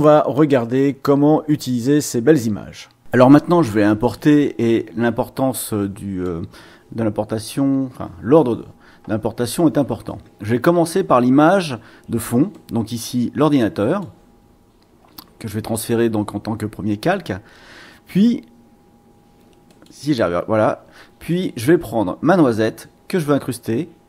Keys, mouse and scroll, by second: 4.6-6.4 drag, 12.5-14.2 drag, 19.7 click, 21.3 click, 22.3-24.0 drag.